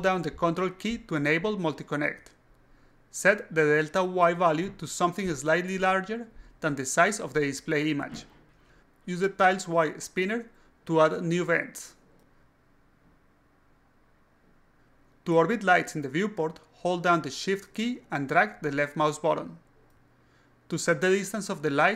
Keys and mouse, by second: 1.5-2.7 drag, 3.9 click, 7.4 click, 7.9 click, 8.4 click, 8.7 click, 9.3 click, 10.2 click, 11.7 click, 12.2 click, 13.2-14.0 alt+drag, 14.3 alt+click, 14.9 shift+click, 15.0 shift+middle click, 15.1 shift+click, 15.1 shift+middle click, 15.3 shift+middle click, 15.3 shift+click, 15.4 shift+middle click, 15.5 shift+middle drag, 15.5 shift+drag, 15.7 shift+middle click, 18.2-21.9 shift+drag.